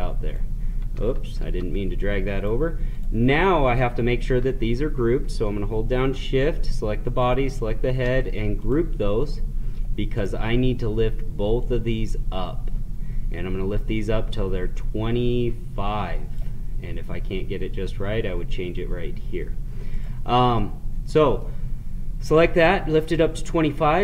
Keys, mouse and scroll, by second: 1.4 ctrl+z, 2.3 click, 7.1-18.9 shift+drag, 19.9 click, 20.5-23.8 middle drag.